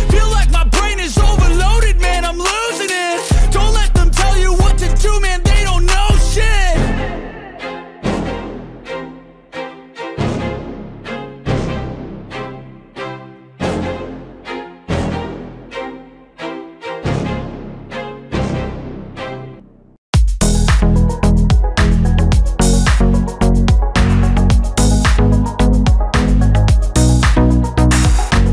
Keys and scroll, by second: 0.3 ctrl+=, 1.9 ctrl+-, 2.6 ctrl+-, 4.0 ctrl+-, 8.3 ctrl+-, 9.2 ctrl+-, 10.3 ctrl+-, 20.7 ctrl+-, 26.7 ctrl+alt+z.